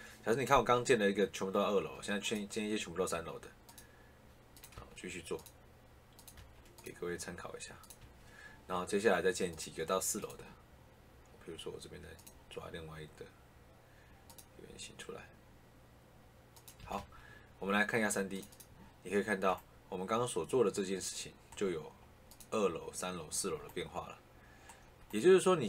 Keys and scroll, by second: 4.7 Escape, 6.3 Escape, 7.9 Escape, 16.7 Escape.